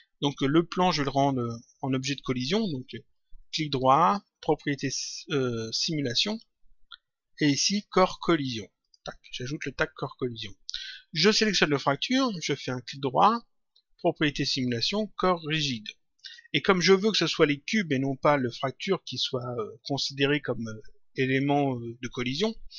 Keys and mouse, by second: 0.9 click, 3.3 right click, 8.7 click, 11.3 click, 13.0 right click, 16.1 click, 19.3 click.